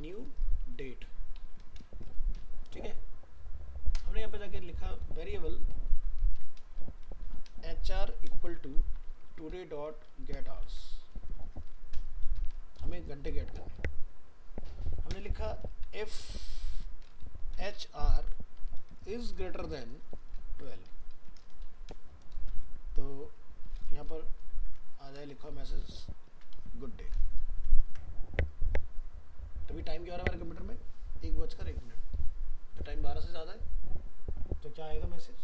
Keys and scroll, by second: 25.3 ctrl+shift+Left, 27.9 ctrl+s.